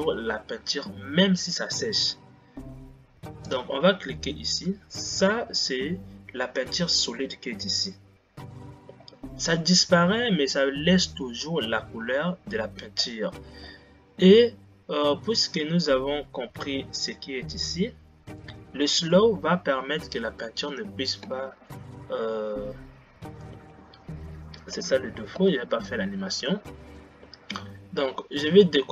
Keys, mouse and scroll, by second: 4.5 click, 6.0-7.6 scroll down 9.